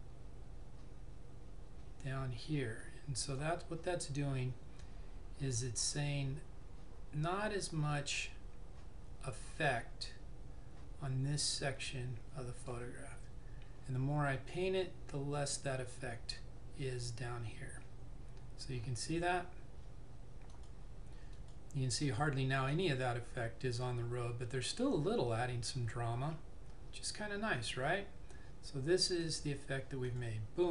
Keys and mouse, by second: 5.9 click, 20.7 click, 29.4 click.